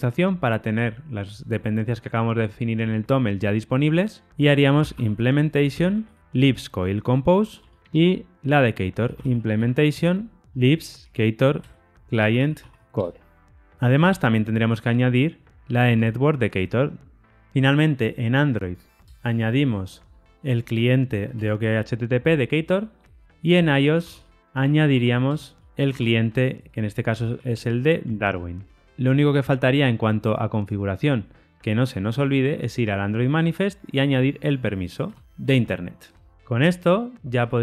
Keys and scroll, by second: 7.5 Tab, 9.9 Return, 10.4 alt+shift+Left, 11.5 Return, 15.7 Tab, 21.3 Tab, 24.3 Return, 25.8 Tab, 27.9 Tab, 35.7 Tab.